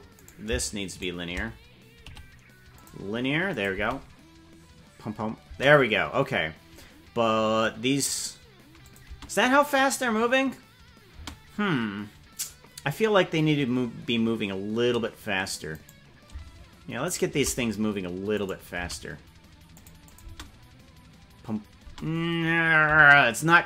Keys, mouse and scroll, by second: 0.1 right click, 0.9 shift+right click, 2.0 t, 3.5 click, 3.9 space, 5.5 space, 8.8 click, 9.1 space, 11.3 space, 15.9 right click, 17.1 shift+right click, 18.4 right click, 18.8 g, 20.1-22.2 drag, 20.2 space, 21.9 space, 23.0 g.